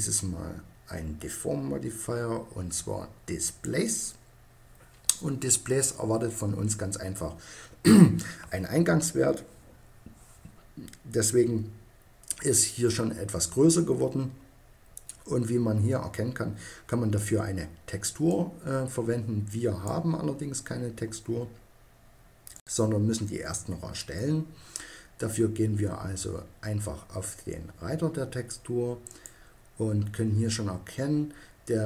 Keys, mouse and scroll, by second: 17.9-19.7 drag, 28.7-30.4 drag.